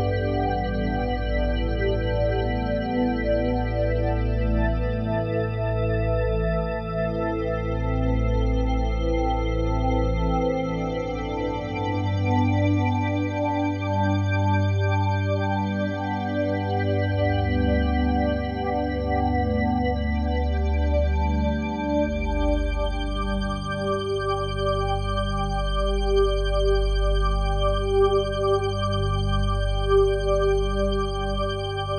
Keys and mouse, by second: 1.9-3.6 drag, 3.6 Delete, 4.4-6.0 drag, 6.0 Delete, 7.3-8.8 alt+drag, 9.3 alt+click, 9.9 alt+click, 11.1 alt+shift+click, 11.5 alt+click, 12.4 shift+click, 13.2 click, 13.9-16.1 drag, 16.1 ctrl+p, 17.3 Down, 17.4 Down, 17.6 Down, 17.7 Down, 18.7 Return, 19.9-26.6 alt+shift+drag, 26.6 g, 28.4 Escape, 29.1 ctrl+alt+click, 29.7 alt+shift+click, 30.2 alt+click, 31.0 alt+shift+click, 31.4 alt+click.